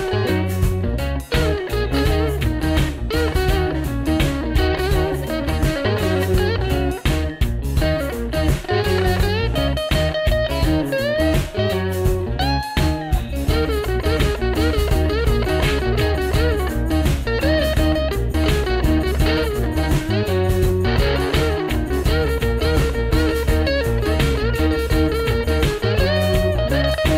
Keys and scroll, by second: 5.8 alt+super+Right, 14.0-17.1 typing, 19.8-20.6 typing, 20.6 Tab.